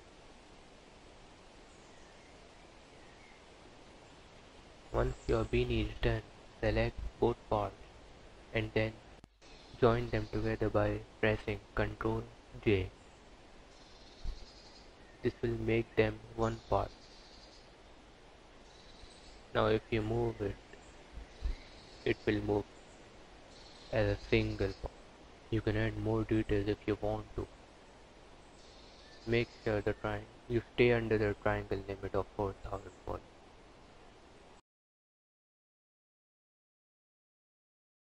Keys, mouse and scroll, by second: 14.0 n, 16.7 g, 20.6 click, 21.7 h, 22.5 click, 25.3 click, 32.2 KP_Decimal, 33.3 click.